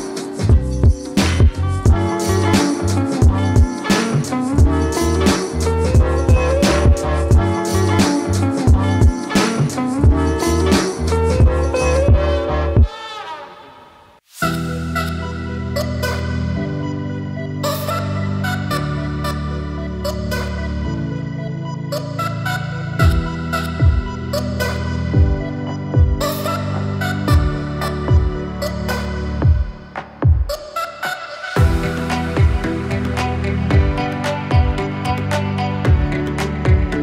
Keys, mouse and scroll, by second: 1.8-4.6 drag, 8.9 ctrl+Num_Lock, 8.9 click, 9.1 ctrl+space, 9.4-10.5 typing, 10.7 click, 13.5-14.3 typing, 15.3 click, 16.6 scroll down 1, 18.4-21.5 drag, 27.0 right click, 28.0 click, 29.2 click, 29.8-30.8 typing, 31.0 click, 33.4 ctrl+space, 33.9-35.5 typing, 35.8-37.0 drag.